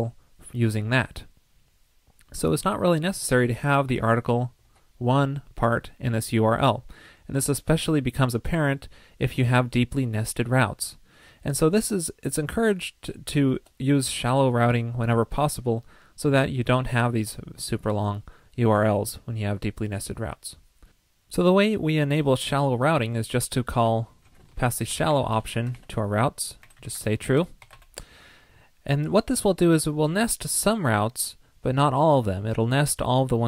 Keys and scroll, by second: 4.6 super+z, 25.7 ctrl+l.